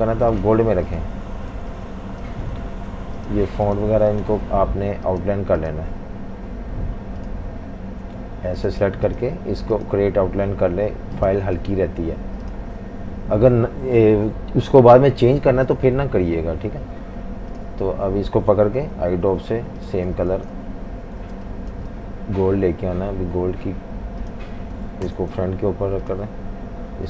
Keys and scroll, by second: 0.7-3.2 typing, 18.9 i, 20.1-21.8 typing, 25.1 shift+super+].